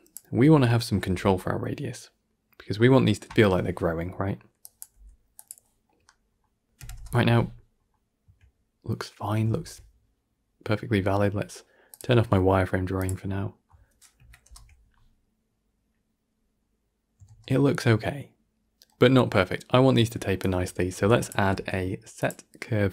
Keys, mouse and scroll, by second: 2.0 click, 4.5 drag, 5.7-6.7 middle drag, 6.7 shift+Left, 6.8 shift+space, 7.7-9.4 scroll up 1, 9.4 shift+space, 12.9-14.1 drag, 14.1 shift+Left, 14.3 shift+space, 17.2 shift+space, 17.4-20.3 middle drag, 20.3 click.